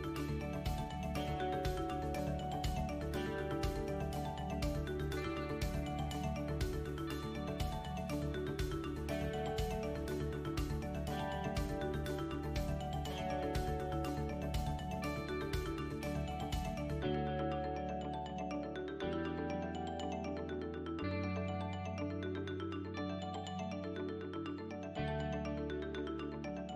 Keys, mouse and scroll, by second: 0.5 e, 3.4 s, 6.5 g, 8.3-10.2 scroll down 6, 10.7 l, 12.1 s, 14.1 KP_1, 15.5 scroll down 1, 16.3-16.9 scroll down 1, 18.7 ctrl+s, 20.4 middle click, 21.4-22.3 scroll down 3, 22.6 KP_7, 24.7-25.6 scroll up 3, 25.2 middle click, 26.2-26.7 scroll down 3.